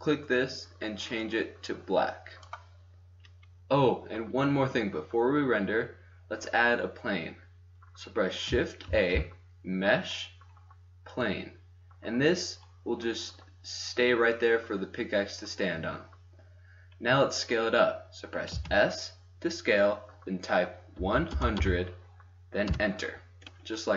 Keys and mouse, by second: 1.6 middle click, 4.7-8.8 middle drag, 8.8 shift+a, 11.2-11.7 drag, 18.4 s, 23.3-23.9 middle drag.